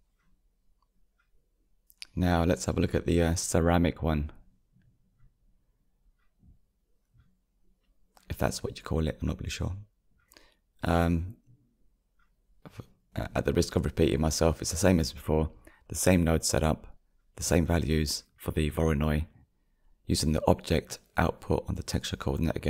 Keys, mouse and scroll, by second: 0.0 ctrl+space, 1.8-2.8 shift+middle drag, 2.8 click, 4.0 g, 4.3 middle click, 4.7 middle click, 5.1 middle click, 6.0-13.9 middle drag, 13.9-15.1 drag, 15.1-17.3 middle drag, 17.3-17.8 drag.